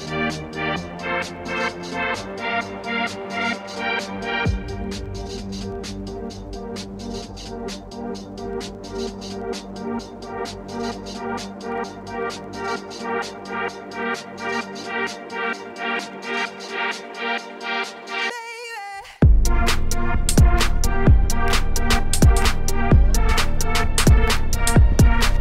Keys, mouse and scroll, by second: 0.3 shift+middle click, 0.5-1.1 scroll down 2, 0.7 shift+middle click, 1.1 click, 1.3 ctrl+s, 1.5-2.3 scroll up 1, 4.2 scroll up 1, 4.5 shift+middle click, 5.3 click, 5.4 right click, 6.1-6.4 scroll up 1, 6.4 scroll down 1, 6.5 shift+middle click, 7.3-9.0 drag, 10.0-11.0 drag, 11.1-12.3 shift+drag, 12.9 scroll up 1, 13.2 click, 13.3 Tab, 13.4 Tab, 15.3-15.6 scroll down 2, 15.6 scroll up 1, 15.7 Tab, 16.0-17.2 drag, 17.5 click, 18.3-18.9 scroll up 2, 18.9 click, 19.2 shift+middle click, 19.9 click, 20.8-21.2 scroll down 1, 21.8-23.1 drag, 23.5-25.4 drag, 25.0 right click.